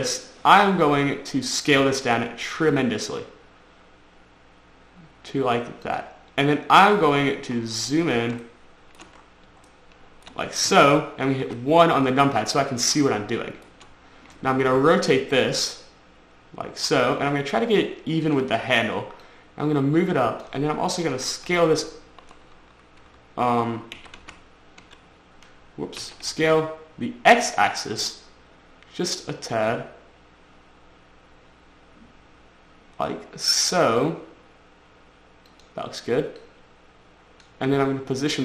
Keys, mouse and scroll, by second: 1.5 scroll down 1, 3.0 s, 6.2 click, 7.7-8.0 scroll up 4, 8.0 scroll down 3, 8.3-8.9 scroll up 4, 8.9 shift+middle click, 9.5 scroll up 2, 10.0 shift+middle click, 11.8 1, 12.6 scroll up 3, 12.9 scroll down 3, 13.3 shift+middle click, 13.9 shift+scroll up 1, 15.0 r, 18.6 click, 19.6 click, 21.5 s, 21.8 y, 23.4 Escape, 24.3-25.2 typing, 26.4 s, 35.8 click, 36.7 click.